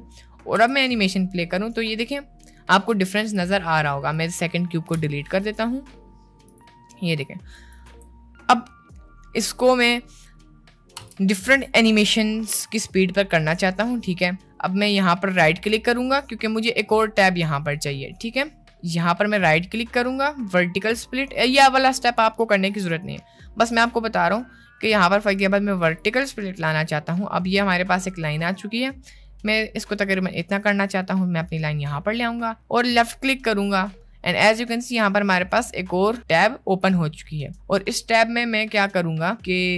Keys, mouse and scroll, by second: 0.5 space, 3.3 space, 4.1 click, 4.9 Delete, 5.4 middle click, 6.5 click, 7.2-7.8 drag, 8.0 space, 9.0 middle click, 10.0 middle click, 11.2-11.6 drag, 13.5 click, 17.7 click, 19.6-27.3 drag, 33.0 right click, 34.9 middle click, 35.8 middle click, 37.1 middle click, 38.8 click.